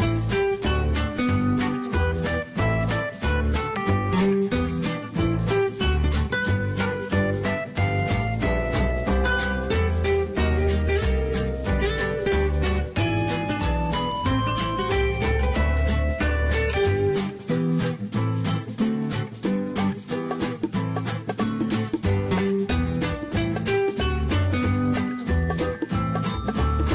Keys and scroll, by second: 22.4 Delete, 22.9 Return.